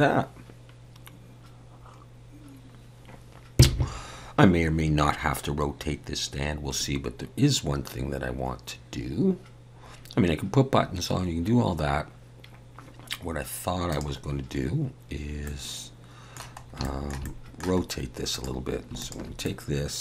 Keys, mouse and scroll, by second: 14.3 click, 15.4 middle click, 16.6 scroll up 2, 16.8 shift+middle click, 17.2 middle click, 17.8-18.3 scroll up 2, 18.3 click, 19.0 shift+click, 19.4 middle click.